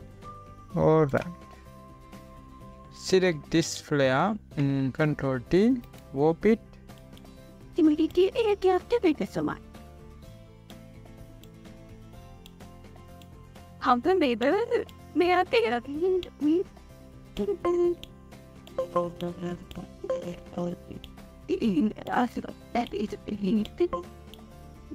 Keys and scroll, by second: 6.5 ctrl+t.